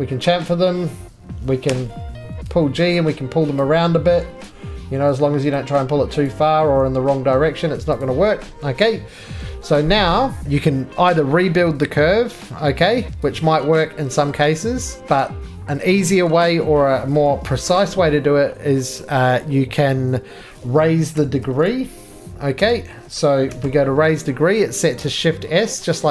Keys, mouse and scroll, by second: 10.4-11.2 scroll, 13.4 click, 14.3-15.0 scroll, 15.0 ctrl+z, 15.0-15.9 scroll, 15.9 scroll, 16.0-16.7 scroll down 2, 16.7 shift+middle click, 17.2 middle click, 17.7 f, 21.0-22.6 typing, 23.6 BackSpace.